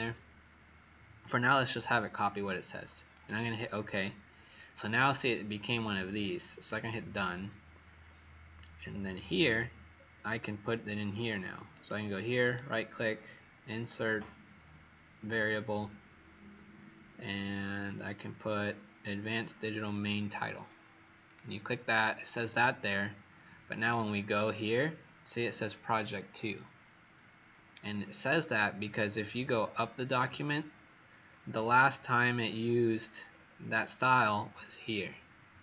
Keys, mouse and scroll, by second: 8.7-9.9 alt+scroll down 3, 9.9-11.6 alt+scroll up 1, 11.6 click, 12.3 right click, 21.2 click, 23.9 click, 27.8-28.2 alt+scroll down 2, 30.8-33.2 scroll up 4, 33.2-35.6 scroll up 4.